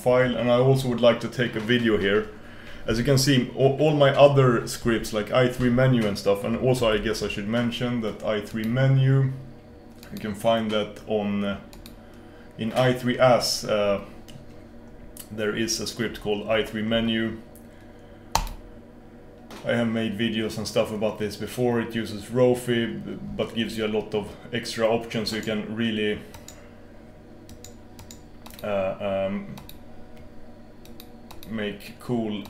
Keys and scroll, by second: 6.9 super+f.